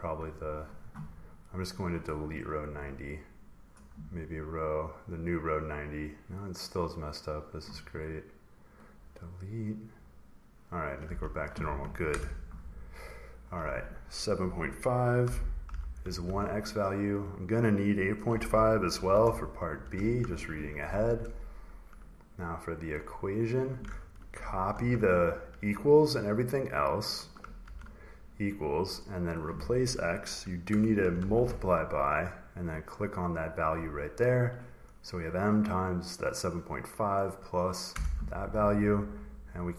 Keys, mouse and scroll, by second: 1.5 click, 1.9 right click, 3.4 click, 4.2 click, 5.0 click, 5.4 click, 5.9 click, 6.7 click, 7.0 right click, 8.6 click, 9.5 click, 10.0 click, 10.8 click, 11.0 s, 12.0 BackSpace, 13.0 click, 15.3-16.4 typing, 17.9-19.0 typing, 20.1 Right, 21.9 click, 22.1 click, 23.8 click, 24.6 ctrl+c, 26.6 click, 26.7 click, 27.6 ctrl+v, 29.2 click, 30.6 BackSpace, 31.1 *, 32.6-34.7 drag, 37.8 Return, 39.0-39.7 drag.